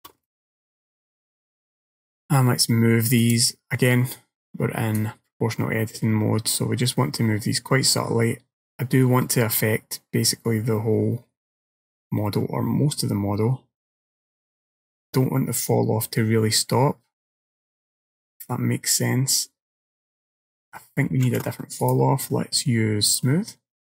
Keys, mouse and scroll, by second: 0.3 middle click, 3.3 click, 5.0 click, 21.3 ctrl+z, 21.9 click.